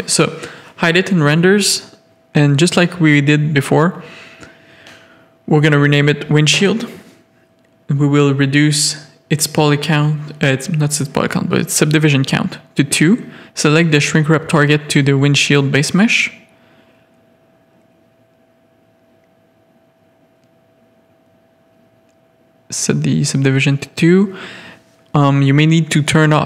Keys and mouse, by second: 0.7 click, 3.9-7.1 drag, 8.9 middle click, 9.7 Tab, 10.1 middle click, 10.4 a, 14.3 click, 21.6 click, 22.7 middle click, 24.4 g, 25.2 click, 25.6 g.